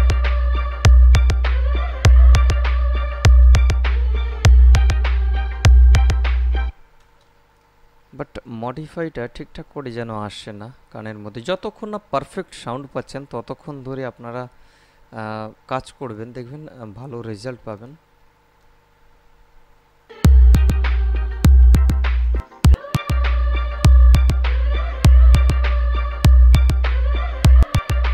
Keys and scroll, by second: 6.9 space, 20.3 space.